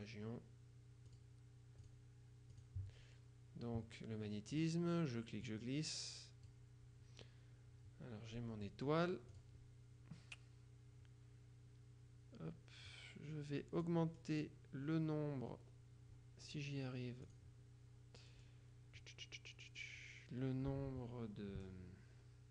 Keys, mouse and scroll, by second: 1.2 click, 2.0 click, 2.6 click, 4.6 click, 5.6-7.1 drag, 9.4 click, 13.0 click, 14.2-15.0 scroll down 2, 15.3-16.3 scroll up 2, 17.4 click, 18.4-19.2 scroll down 2, 21.7-22.2 scroll down 2.